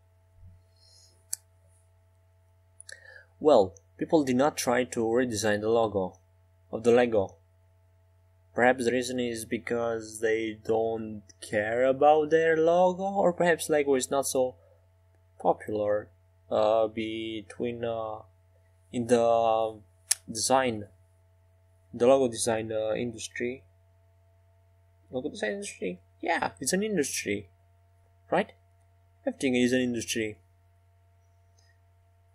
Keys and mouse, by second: 3.1-7.6 drag, 6.9 Tab, 11.2-13.2 middle drag, 14.8-16.5 middle drag, 16.5 Tab, 17.5 ctrl+r, 29.6-30.9 middle drag.